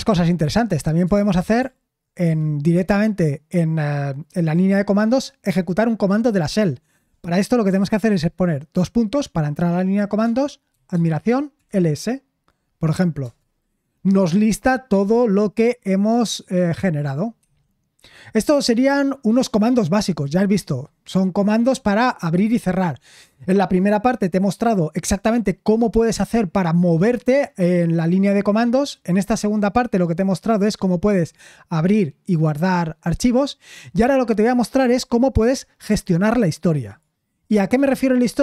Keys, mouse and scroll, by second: 2.2 Escape, 10.9 typing.